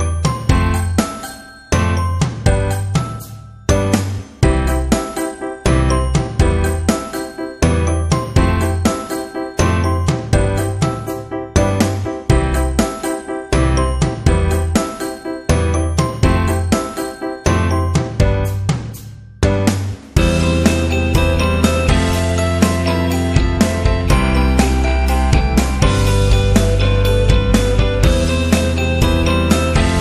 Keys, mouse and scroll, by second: 0.7 click, 1.9 click, 6.7 click, 9.5 click, 12.6 click, 13.6 click, 15.4 click, 17.0 click, 17.6 click, 19.8 click, 21.0 click, 22.8 click, 23.9 click, 24.0 click, 28.0 click, 29.9 click.